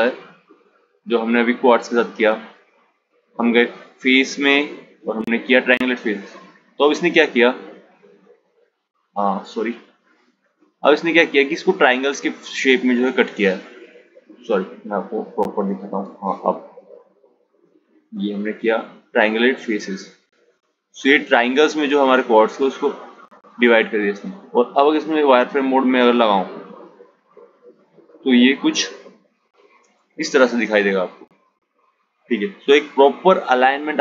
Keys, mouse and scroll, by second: 2.6-5.7 drag, 11.8 ctrl+z, 12.0 ctrl+z, 12.2 ctrl+z, 12.7 ctrl+z, 13.0 ctrl+z, 15.6-18.6 drag, 25.9 click, 27.6 Tab, 29.7 click.